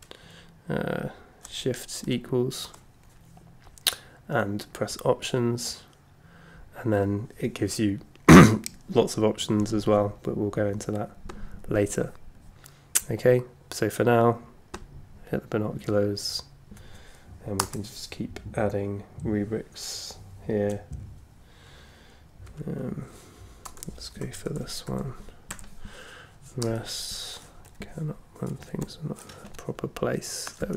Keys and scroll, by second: 2.0 shift+=, 17.6 Return, 22.5 c, 23.6-25.5 typing, 26.6 Return, 27.6 Down, 29.4 Up.